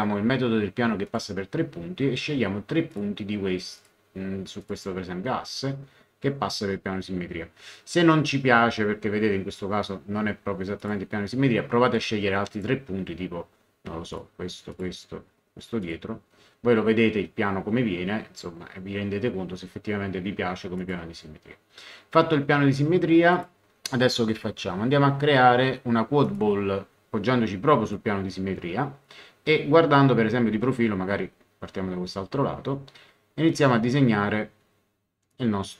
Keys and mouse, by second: 1.0 click, 2.9 click, 10.8 click, 11.9 right click, 12.5 click, 14.1 click, 15.8 click, 20.7 click, 23.3 click, 26.2 click, 27.8 click, 35.3 click.